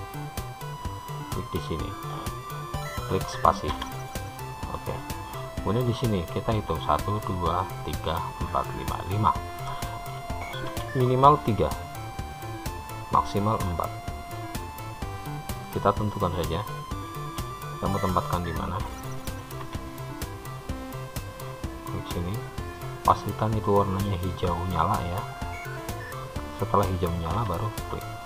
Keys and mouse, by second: 10.9 k, 19.8 k.